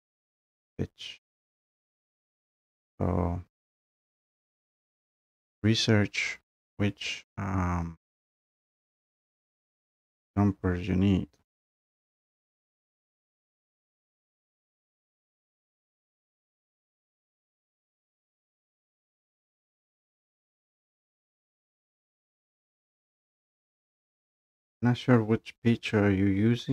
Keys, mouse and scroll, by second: 1.9-3.7 drag, 11.9 click, 12.2 click, 12.7 scroll down 2, 13.0 click, 13.2 click, 13.3 click, 13.4 click, 13.4 click, 13.7-14.6 scroll down 6, 15.0-15.3 scroll up 4, 15.7-18.0 typing, 15.8 click, 18.5 click, 18.6 click, 18.9 click, 19.3 click, 19.4 BackSpace, 20.1 click, 21.3 click, 21.8 click, 22.0 click, 22.4 click, 23.9 click, 23.9-24.4 scroll, 24.4 scroll down 3.